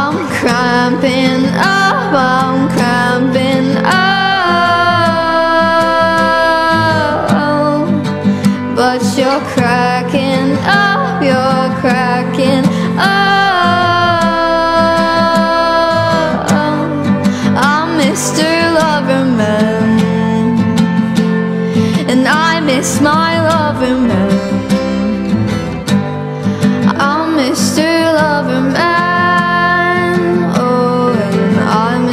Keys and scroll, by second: 15.1 shift+s, 17.1 s.